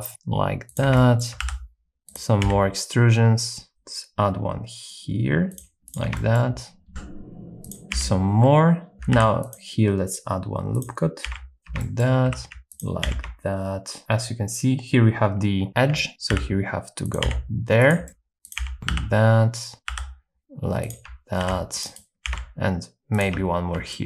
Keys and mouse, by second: 0.1 shift+g, 0.7 shift+click, 0.9 shift+middle click, 1.4 e, 2.1 click, 2.4 s, 3.7 ctrl+r, 5.5 click, 5.8 s, 5.8 g, 5.9 shift+click, 6.1 shift+middle click, 6.9 e, 7.9 s, 9.1 ctrl+r, 10.7 click, 11.2-14.0 typing, 11.8 shift+middle click, 16.1 alt+h, 16.3-20.4 typing, 17.0 click, 17.9 click, 18.0 shift+middle click, 18.5 click, 20.9 click, 21.4 ctrl+r, 22.3 s, 23.2 shift+click, 23.9 shift+middle click.